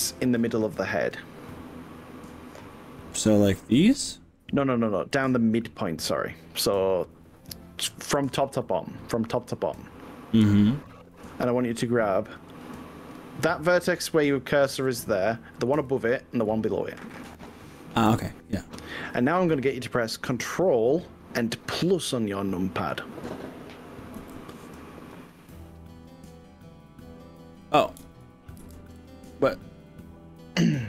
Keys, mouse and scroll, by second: 3.0-4.2 drag, 5.2 click, 16.0 click, 16.8 shift+click, 17.5 shift+click, 24.2 ctrl+-, 28.6 ctrl+shift+=, 30.0-30.3 scroll down 3, 30.2 middle click, 30.7-30.8 scroll up 4.